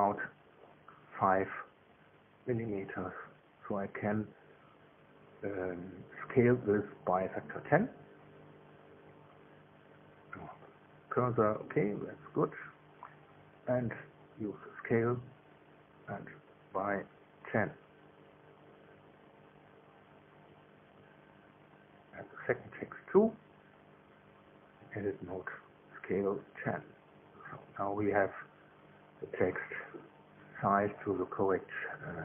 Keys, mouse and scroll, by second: 3.5 Tab, 5.5 Tab, 5.9 a, 6.3 a, 11.8 KP_7, 15.7 s, 20.5 KP_1, 20.7 KP_0, 21.2 KP_Enter, 22.7 Tab, 23.2 right click, 23.6 Tab, 24.6-26.6 typing, 27.1 KP_Enter, 27.6 Tab, 29.0 middle click, 30.9 right click.